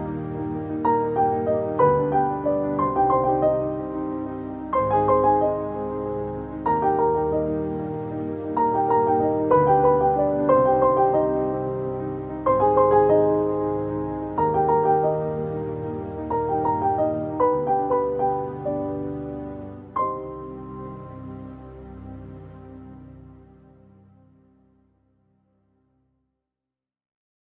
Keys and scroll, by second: 25.0 ctrl+d.